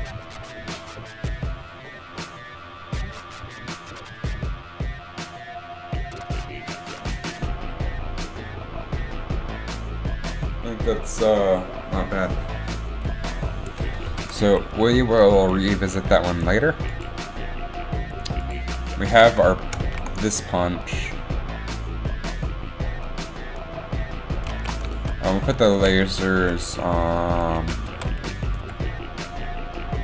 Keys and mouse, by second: 14.2 ctrl+s, 14.3 alt+a, 19.8 shift+Left, 19.9 alt+a, 20.8 shift+Left, 20.8 alt+a, 24.7 alt+a, 27.7 z, 28.0 z, 28.6 m.